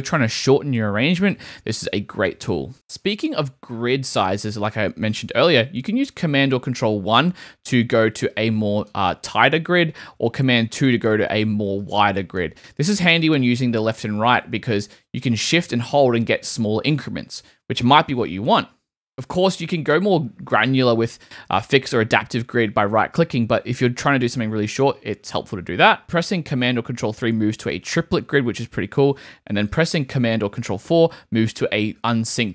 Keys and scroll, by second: 2.1 super+z, 6.7 super+1, 10.1 super+2, 13.4 super+1, 14.3 super+Right, 14.9 Left, 15.3 shift+Right, 15.4 shift+Right, 15.9 shift+Right, 26.9 super+3, 28.8 super+z, 29.7 super+z, 30.7 super+4.